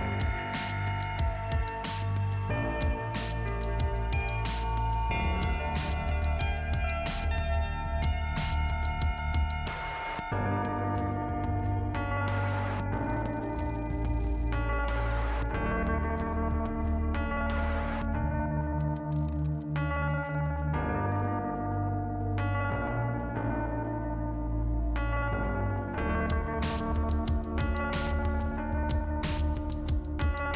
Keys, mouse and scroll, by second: 0.5 click, 0.9 click, 1.5 click, 2.1 click, 3.9 click, 8.6 right click, 9.9 right click, 11.3 click, 13.4 click, 14.4 click, 15.0 click, 16.3-17.5 scroll up 2, 17.6 m, 18.8 click, 19.2 m, 20.8 click, 25.1-26.2 scroll down 2, 27.7 click, 27.9 click, 28.2 click, 29.1 click, 30.2 scroll up 1.